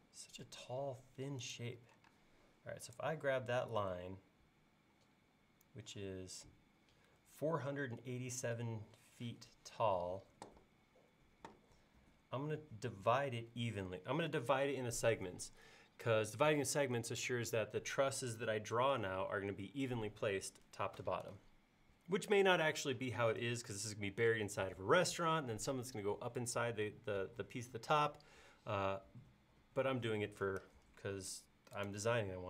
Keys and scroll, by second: 2.1 space.